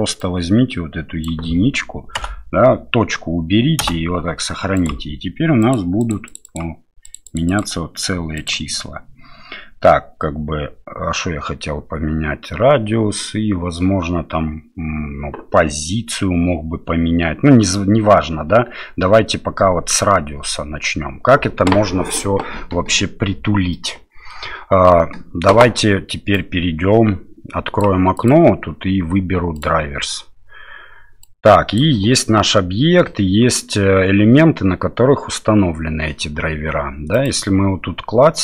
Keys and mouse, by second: 5.7 click, 6.0 click, 6.2 click, 6.4 click, 7.1 click, 8.4 click, 23.7 middle click, 26.3-27.9 drag, 28.3-29.7 drag, 31.3 click, 37.1 click.